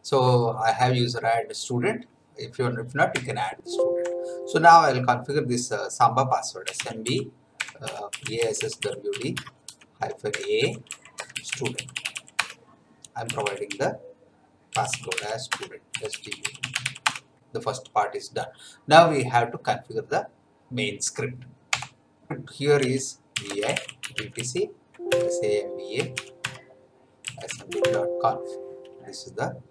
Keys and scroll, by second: 3.1 BackSpace, 6.3-17.3 typing, 21.8 F8, 22.8-28.2 typing, 25.1 Tab.